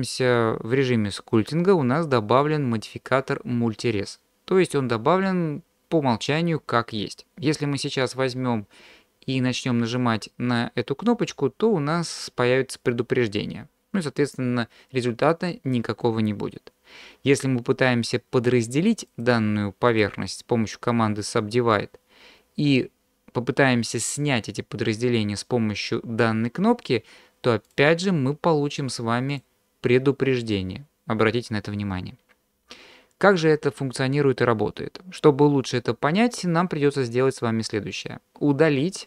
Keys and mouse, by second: 11.1-11.8 drag, 19.1 click, 19.9 click, 27.7-28.7 drag, 29.3 click.